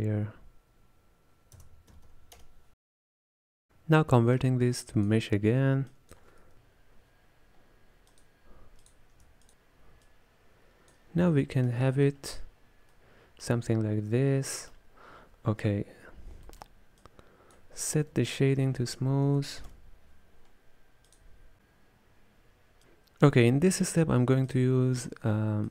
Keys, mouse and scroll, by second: 4.2-4.9 middle drag, 4.9 click, 6.0 click, 10.1 click, 11.5 middle click, 12.3-13.0 scroll up 2, 13.0 middle click, 13.7 scroll down 2, 13.8-17.1 middle drag, 17.1 click, 18.0 space, 24.6 click.